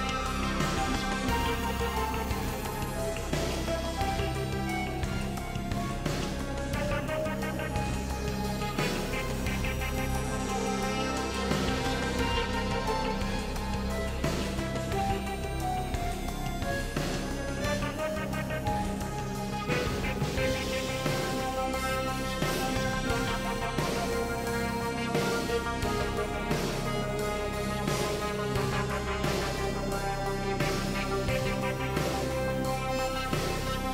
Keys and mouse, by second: 0.8 click, 2.1 click, 3.7 KP_3, 5.5 ctrl+r, 8.3 click, 9.8 KP_Decimal, 10.5 alt+z, 11.5 shift+middle click, 12.3 middle click, 13.3 KP_3, 15.6 shift+middle click, 17.5 shift+middle click, 18.6 g, 20.1 ctrl+click, 21.8 ctrl+z, 22.4 g, 24.6 ctrl+click, 25.6 g, 27.5 ctrl+click, 28.5 g, 31.1 click, 31.7 g, 33.5 g.